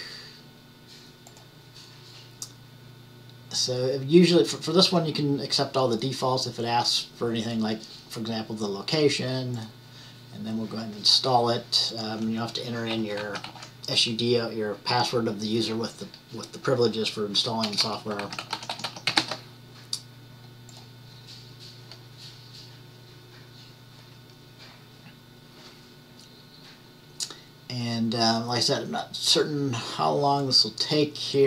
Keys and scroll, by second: 13.1-14.1 typing, 18.1-19.8 typing.